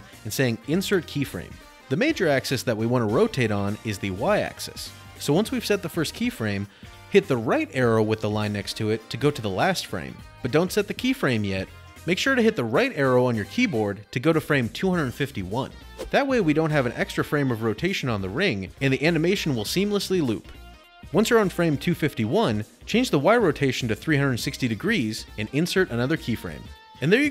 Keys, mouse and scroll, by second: 1.1 right click, 2.0 right click, 5.0 ctrl+z, 9.0 click, 10.5-14.1 drag, 12.7 Right, 15.0 Right, 17.7 click, 19.3-20.8 typing, 23.2 right click, 24.6 click.